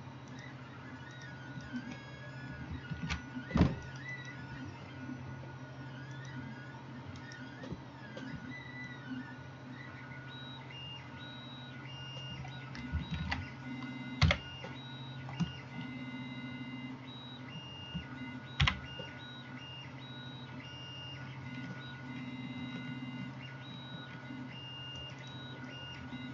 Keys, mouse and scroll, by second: 3.1 ctrl+r, 4.3-6.3 middle drag, 6.3-25.2 drag, 7.3 middle click, 7.3 right click, 13.2 ctrl+z, 14.3 o, 18.7 g, 25.2-26.3 middle drag.